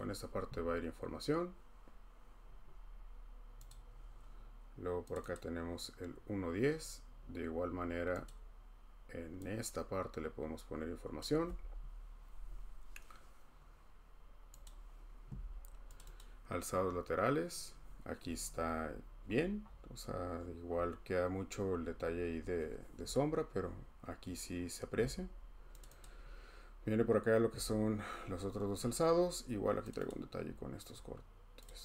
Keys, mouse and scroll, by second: 3.7 click, 5.2 click, 5.3 click, 8.2 click, 11.3 click, 16.0 click, 16.2 click, 19.2-19.8 scroll, 20.3-20.8 scroll, 21.8-22.5 scroll, 23.1 scroll, 23.8 scroll, 25.8 click, 26.0 click, 29.9 click, 30.1 click, 30.4-31.2 scroll, 31.6 click.